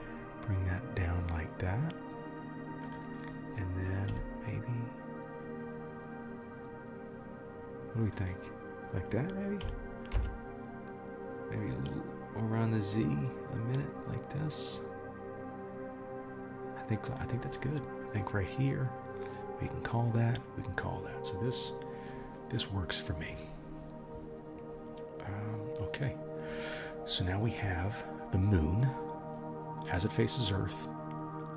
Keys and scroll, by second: 4.1 r, 9.7 r.